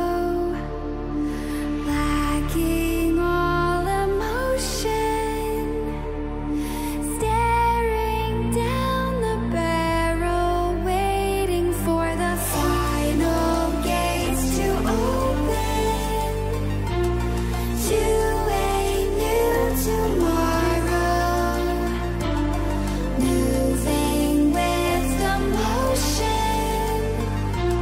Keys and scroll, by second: 8.4 ctrl+g, 9.2 ctrl+j.